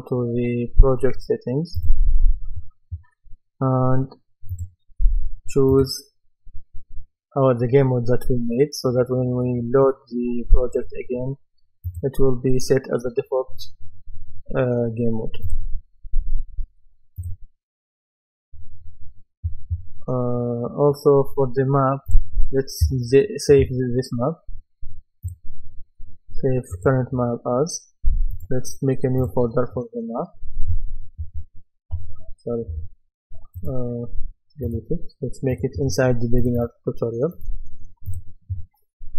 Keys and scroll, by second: 31.2 shift+m, 32.7 BackSpace.